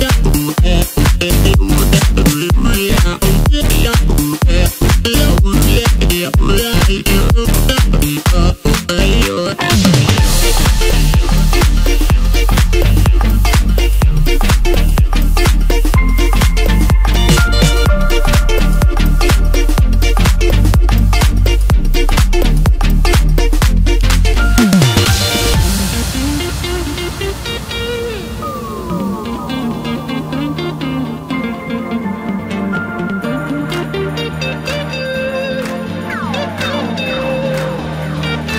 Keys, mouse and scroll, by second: 0.3 click, 0.8-1.3 scroll up 1, 1.3 shift+click, 1.6 shift+click, 2.1 shift+click, 2.8 shift+click, 3.7 shift+click, 3.9 shift+click, 4.3 shift+click, 4.5 shift+click, 5.2 shift+click, 5.4 shift+click, 5.8 scroll down 1, 6.1 middle click, 6.8-7.7 scroll up 1, 7.7 ctrl+b, 11.7-12.1 scroll down 1, 12.1 Tab, 12.6-13.8 middle drag, 13.8 drag, 14.8 click, 15.2-15.8 scroll up 1, 15.8 KP_1, 16.2 Tab, 17.1 ctrl+r, 22.0 middle click, 22.9 KP_7, 23.6 3, 23.9-24.7 scroll down 2, 24.7 click, 26.6 i, 28.0 Tab, 28.4-28.8 scroll down 2, 28.8 KP_1, 29.6 scroll up 1, 29.8 scroll down 1, 30.0-30.6 middle drag, 30.6-31.3 scroll up 2, 31.3 scroll up 1, 31.6 scroll down 3, 31.8-32.2 middle drag, 32.2-32.5 scroll up 1, 32.5 Tab, 33.2 KP_7, 33.9-34.8 scroll up 3, 34.8 click, 35.8 KP_Add, 36.5 KP_1, 38.0-38.5 KP_8.